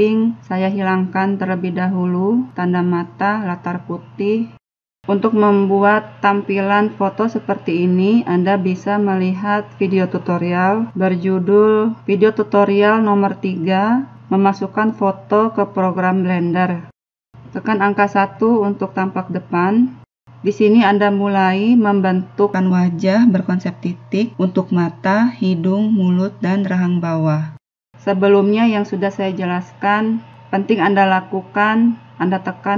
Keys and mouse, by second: 0.3 click, 1.1 click, 2.4 n, 5.3 middle click, 5.5-6.7 drag, 6.7-10.3 middle drag, 6.7 n, 15.5-20.0 middle drag, 20.0 KP_1, 27.7 a, 31.9 a.